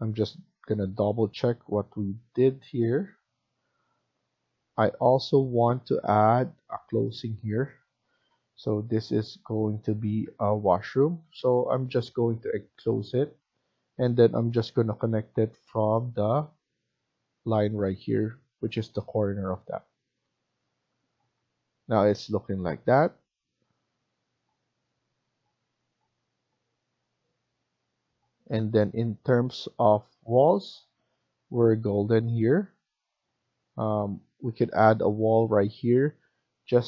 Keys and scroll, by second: 7.7-8.6 typing, 24.8 Escape.